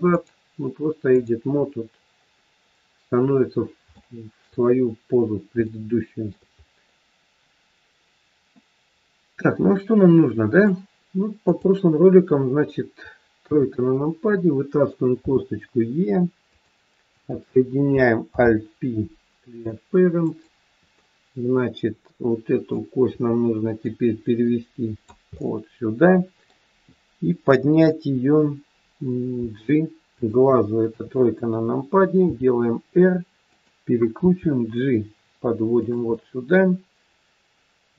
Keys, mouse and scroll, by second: 0.0 click, 2.2-3.1 scroll down 2, 3.3-3.9 scroll down 2, 3.9 shift+middle click, 4.6 scroll up 2, 5.6 shift+middle click, 6.6 scroll up 1, 7.5-7.9 scroll up 2, 8.5 middle click, 11.2 click, 13.4 KP_3, 15.1 e, 17.1 click, 18.3 alt+p, 20.9 middle click, 23.9 click, 25.3 middle click, 29.3 g, 30.7 KP_3, 32.2 r, 34.2 g, 36.1 middle click.